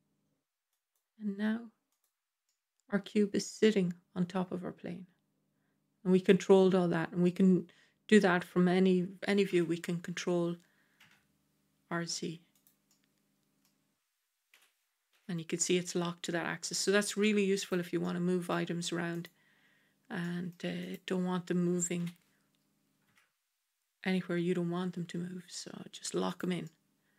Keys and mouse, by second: 2.3-6.1 middle drag, 7.1-9.2 middle drag, 9.4 g, 12.8-13.5 middle drag, 14.4 g, 17.9-18.4 middle drag, 19.1 click, 20.1 middle drag, 20.8 click, 21.9 g, 26.5-27.1 middle drag.